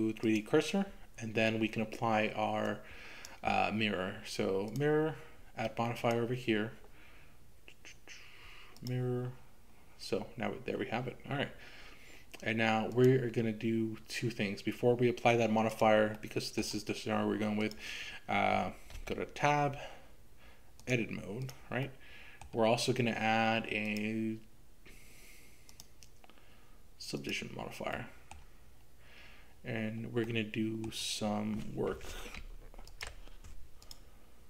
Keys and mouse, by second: 2.7 click, 6.1-8.9 drag, 12.9-14.0 drag, 15.7 click, 16.3 middle click, 18.9 Tab, 21.4 click, 21.8 middle click, 24.0 click, 25.7-27.4 drag, 28.0 middle click, 30.3 middle click, 32.4 ctrl+r, 33.0 ctrl+r, 33.1 ctrl+r, 33.8 click.